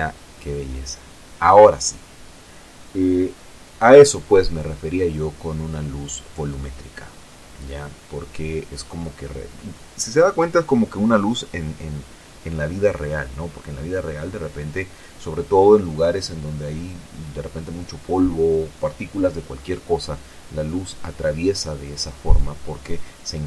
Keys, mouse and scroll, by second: 6.7 ctrl+Right, 8.8 ctrl+z, 11.0 z, 12.0 scroll down 2, 12.6-13.8 middle drag, 14.5 F12.